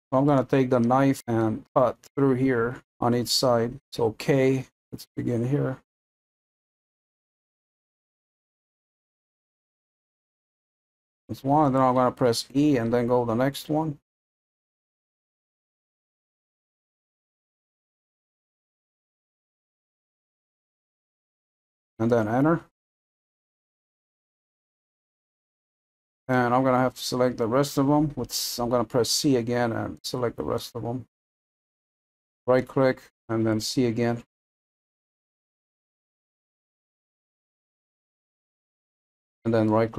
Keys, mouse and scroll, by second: 3.8 k, 23.0-30.0 middle drag, 30.0 c, 32.0-35.0 middle drag, 35.0 c, 39.7-39.9 middle drag.